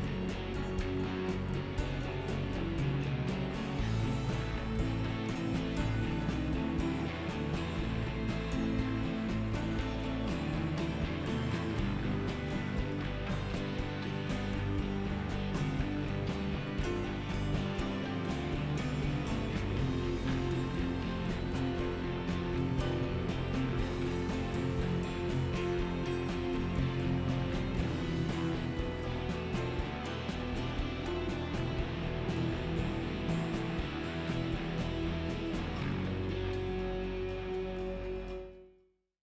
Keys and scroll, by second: 5.4 a, 15.3 KP_Divide, 18.6 s, 25.0 Tab.